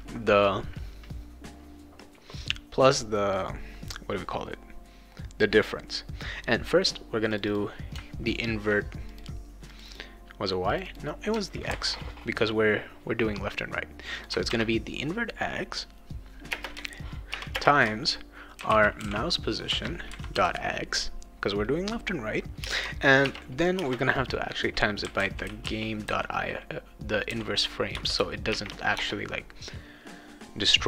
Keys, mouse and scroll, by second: 7.3 click, 7.4 click, 9.1 click, 9.7 click, 9.9 click, 10.7 click, 11.7 ctrl+c, 14.2 click, 16.5-20.9 typing, 19.7 Return, 22.6-26.1 typing, 27.3 i, 28.9 BackSpace.